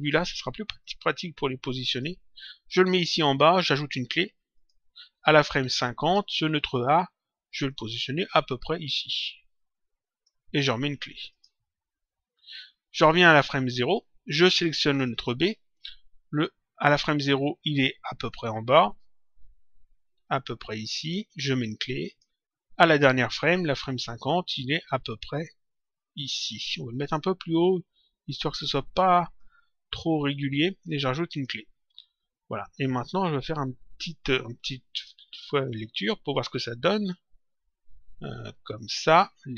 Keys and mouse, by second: 0.8 click, 4.5 click, 5.9 click, 7.6 click, 11.2 click, 13.0 click, 15.1 click, 18.2 click, 22.0 click, 24.8 click, 31.2 click, 32.6 middle click, 34.9 click, 36.6 click, 38.6 click.